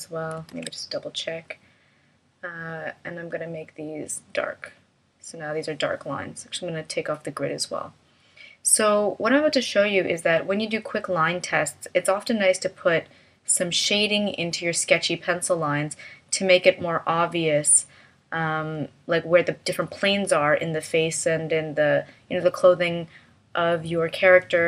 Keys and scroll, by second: 0.5 super+a.